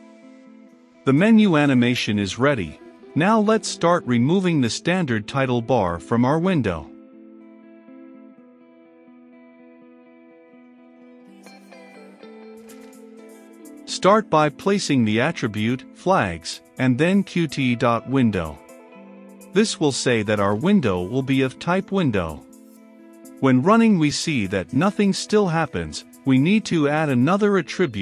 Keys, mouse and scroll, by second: 8.1 Return, 9.0 Up, 9.6-18.5 typing, 11.5 Return, 18.7 Down, 19.0 Return, 20.4-28.0 drag.